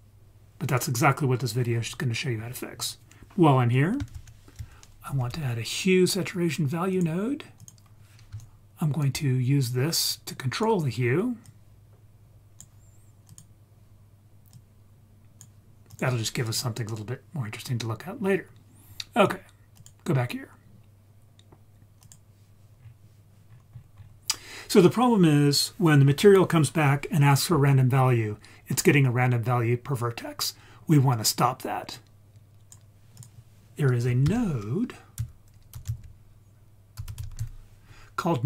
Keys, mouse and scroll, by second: 0.7 click, 4.1 shift+a, 8.4 ctrl+right click, 9.9-10.6 drag, 11.4-12.6 drag, 13.3 click, 16.4 scroll down 2, 17.7-18.1 scroll down 2, 18.1-19.7 scroll up 3, 19.7-22.1 drag, 22.8-23.5 scroll down 2, 23.5-25.9 scroll up 5, 25.9-27.1 scroll up 1, 30.9-31.9 scroll down 2, 31.9-32.7 drag, 33.1 click, 34.2 shift+a.